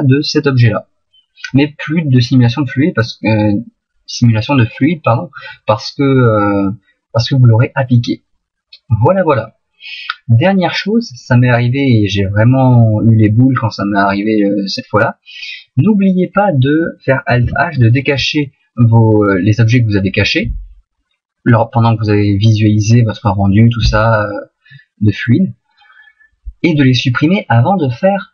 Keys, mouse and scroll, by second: 7.3 middle click, 9.5 middle click, 11.2 middle click, 17.5 alt+h, 19.3 right click, 22.9 middle click.